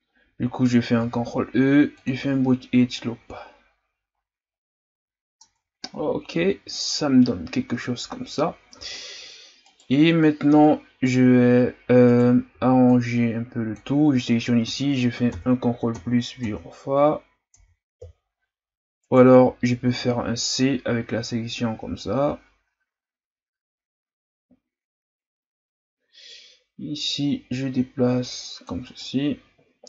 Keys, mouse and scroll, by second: 1.0 ctrl+e, 3.0-4.1 scroll down 1, 4.1-5.4 scroll up 5, 5.4 Tab, 6.0-6.3 scroll down 1, 6.3 a, 6.6-7.2 scroll down 4, 7.2-7.7 scroll up 5, 8.7 Tab, 9.6 right click, 11.2 z, 12.0 right click, 12.5 b, 15.3 ctrl+KP_Add, 16.0 ctrl+KP_Add, 17.5 ctrl+KP_Add, 19.0 right click, 19.8 c.